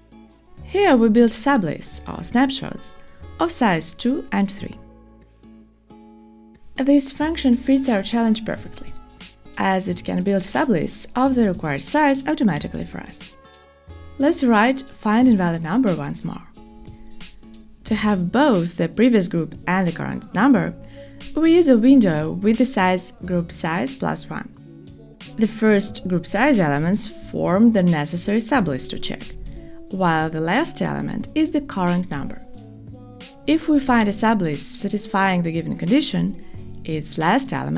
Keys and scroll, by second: 11.3 Return, 17.3 alt+shift+Left, 21.9 Return, 26.9 alt+Up.